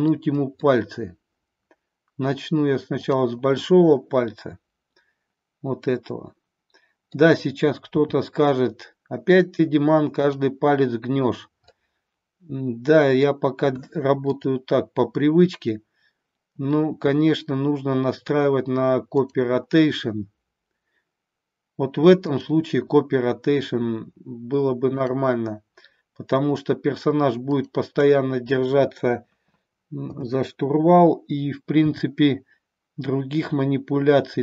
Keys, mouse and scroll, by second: 0.1 scroll up 1, 0.3 middle click, 2.9-5.4 drag, 5.9-7.3 middle drag, 8.0 r, 11.6-13.3 middle drag, 22.2-24.4 shift+drag, 25.0-27.1 shift+drag, 27.6 shift+click, 30.1 KP_7, 31.9 r.